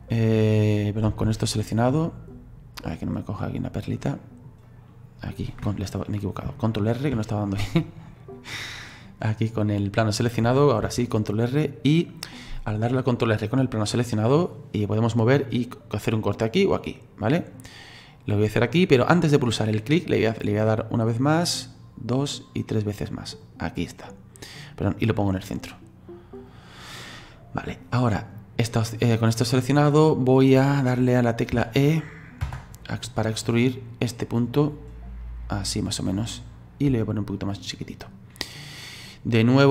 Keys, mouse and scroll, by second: 0.2 click, 0.8 right click, 1.3 alt+r, 1.7 right click, 2.8 click, 4.1 middle click, 4.6 right click, 6.5 ctrl+r, 7.7 click, 9.6 click, 10.0 right click, 10.8 ctrl+r, 28.2 click, 29.6 right click, 31.5 e, 33.3 click, 33.7-34.5 scroll down 2, 34.5-36.9 drag, 36.9 s.